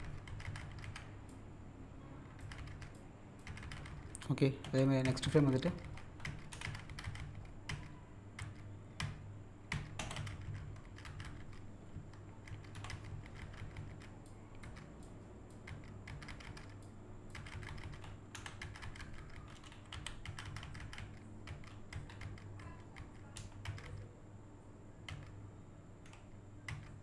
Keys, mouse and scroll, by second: 1.3 click, 2.9 click, 4.6 z, 6.5 Down, 14.3 click, 15.0 click, 16.8 click, 18.3 Left, 19.9 z, 21.2-24.4 typing.